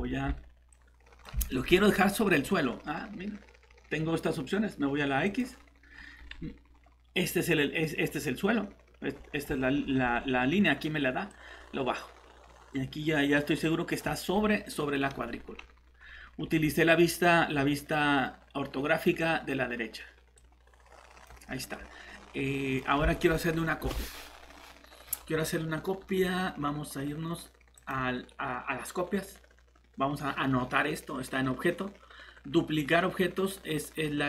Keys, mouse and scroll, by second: 1.5 middle click, 1.7 scroll up 1, 5.2 click, 5.9-6.7 scroll up 1, 6.7-8.0 scroll down 1, 9.7-11.3 scroll up 1, 11.3 click, 21.7 middle click, 27.7 click.